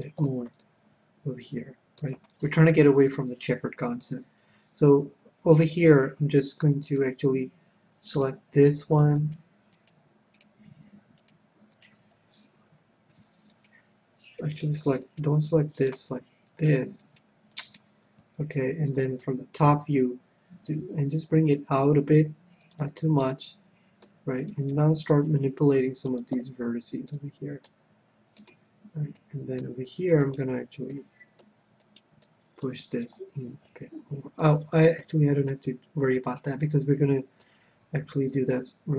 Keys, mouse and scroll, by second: 0.0-1.7 drag, 0.2 a, 0.6-2.1 middle drag, 2.4 middle click, 2.9 scroll up 1, 3.1-4.8 middle drag, 5.4-6.6 scroll down 1, 6.6-8.2 middle drag, 8.0-13.3 right drag, 13.5-19.1 right drag, 19.4 KP_7, 20.7 g, 22.8-24.3 drag, 22.8 a, 23.2-24.9 middle drag, 24.3-26.4 right drag, 25.2 g, 26.2-27.8 drag, 26.4 a, 27.1-33.8 middle drag, 30.2-33.7 right drag, 33.7 g, 34.4-36.1 drag, 35.0 a, 35.5-36.6 middle drag, 38.1 KP_1.